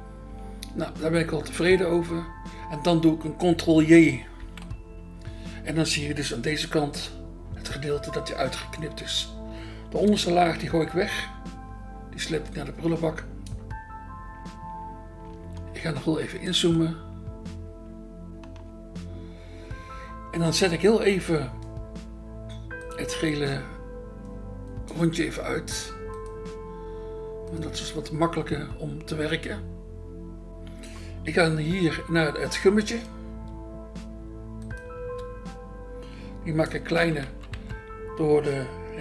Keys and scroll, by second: 4.4 ctrl+j, 6.7 BackSpace, 8.2 BackSpace, 10.7 BackSpace, 35.0 BackSpace, 36.7 [, 37.0 [, 37.2 [, 37.5 [.